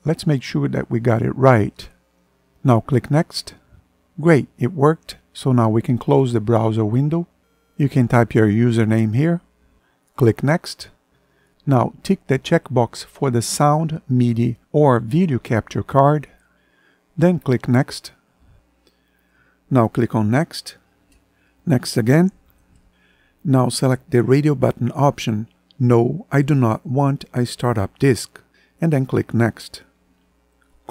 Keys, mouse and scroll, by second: 4.8 ctrl+End.